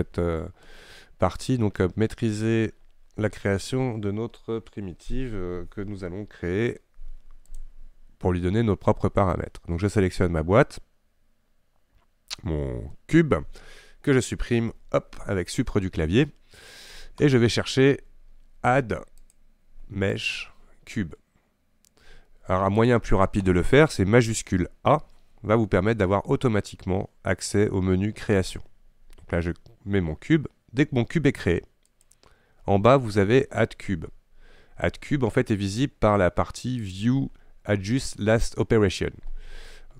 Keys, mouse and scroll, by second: 7.5 click, 14.8 Delete, 19.3-22.3 drag, 22.9 click, 25.0 shift+a, 36.9-39.9 drag.